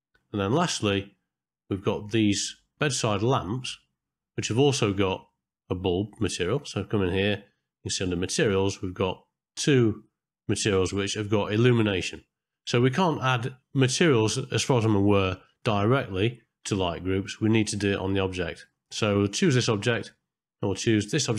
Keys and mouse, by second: 0.0 shift+middle click, 0.8 middle click, 1.4 shift+middle click, 2.0 middle click, 2.6 ctrl+middle click, 3.2-3.5 shift+middle drag, 3.6 middle click, 4.5 shift+middle click, 5.2 click, 6.6 click, 7.2 middle click, 18.8 shift+middle click, 20.0 shift+middle click, 21.1 shift+middle click.